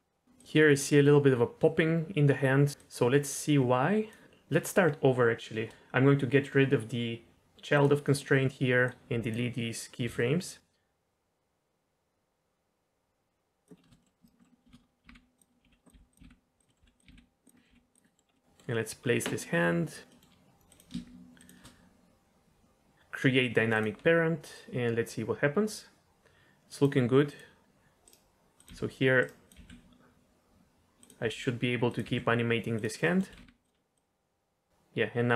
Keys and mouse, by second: 0.3-2.7 drag, 3.8 click, 8.8-9.3 drag, 10.0 Delete, 10.4-13.6 drag, 13.8 shift+middle click, 14.0 middle click, 14.6-17.7 typing, 16.7 middle click, 17.5 middle click, 18.0 middle click, 18.3 middle click, 20.1 middle drag, 21.3 shift+click, 24.5-26.8 drag, 27.2 click, 28.5 click, 28.6 g, 29.1 right drag, 29.4 click, 29.5 g, 31.2 r, 31.8 click, 32.0 g, 32.7 click, 33.2 r, 33.4 r, 33.9-35.3 drag.